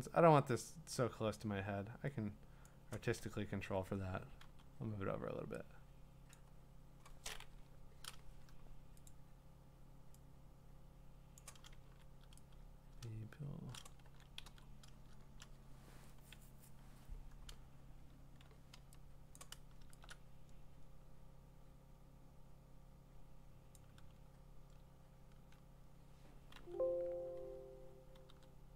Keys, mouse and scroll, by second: 2.6-4.3 drag, 4.4 m, 5.9 click, 6.4 click, 7.6 Left, 9.1 click, 11.4 click, 11.8 v, 13.3-17.0 drag, 14.0 ctrl+d, 14.5 v, 19.4 click, 21.6 click, 23.7 click, 26.5 m, 28.3 l.